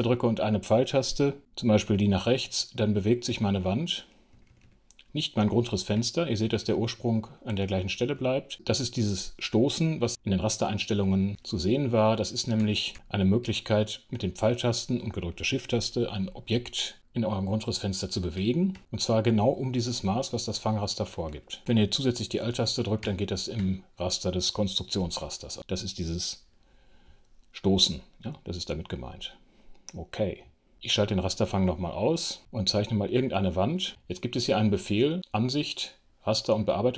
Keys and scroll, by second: 18.3 shift+Right, 20.9 shift+Left, 22.9 alt+shift+Right, 26.5 F6, 36.2 alt+f.